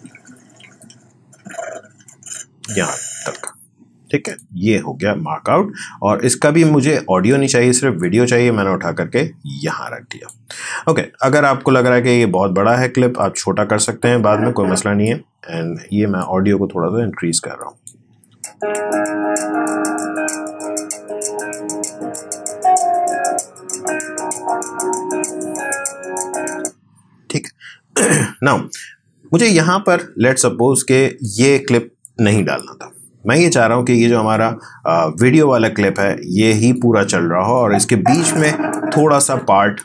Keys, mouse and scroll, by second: 0.8-2.5 drag, 2.5 space, 4.3 click, 8.0-11.0 drag, 11.0-11.5 scroll down 1, 11.9 alt+scroll down 1, 13.9-18.2 drag, 18.2 space, 26.5 space, 31.2 click, 32.3 Delete, 34.3-39.8 drag.